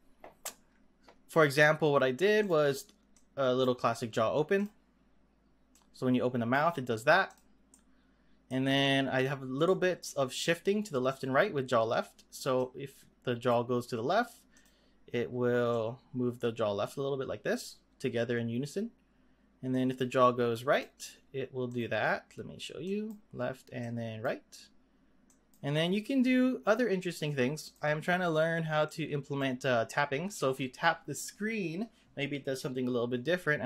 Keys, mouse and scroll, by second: 2.4 click, 3.1-4.6 drag, 5.7-7.3 drag, 7.7-11.0 middle drag, 11.0 click, 12.6-14.7 drag, 15.7-18.7 drag, 19.7-21.8 drag, 22.8-27.7 drag, 28.8 click.